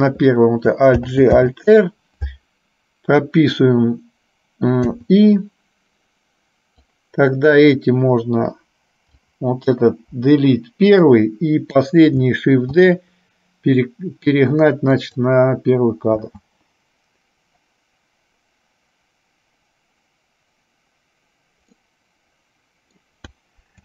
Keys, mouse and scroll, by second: 1.2 alt+g, 7.0 click, 9.2 click, 10.3 Delete, 11.2 click, 16.3 space, 22.1-23.2 middle drag.